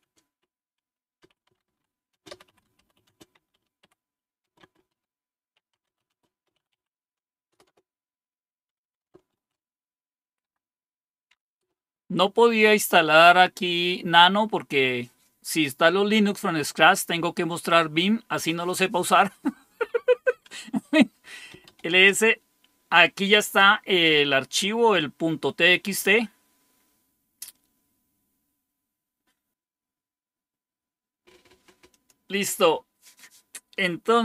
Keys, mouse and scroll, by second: 0.0-11.6 typing, 21.2-22.1 typing, 31.8 click, 32.5 click.